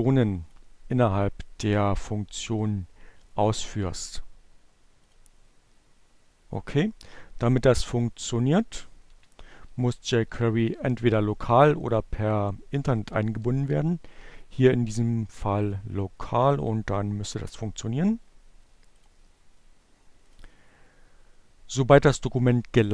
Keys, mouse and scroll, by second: 4.3 click, 7.2 click, 8.1 BackSpace, 8.1 Delete, 10.7 click, 11.9 BackSpace, 14.5 click, 16.3 click, 18.6 click, 20.2 click.